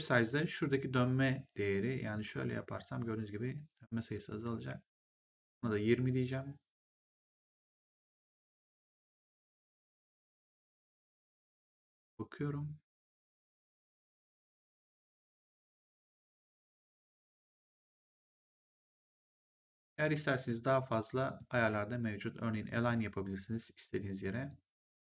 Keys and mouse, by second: 2.0 click, 21.2 click, 22.6 click, 24.3 click.